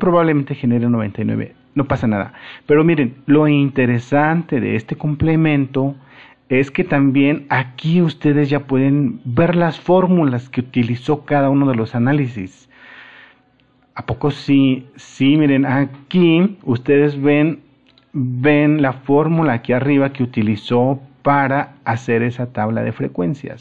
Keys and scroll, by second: 18.4 super+-.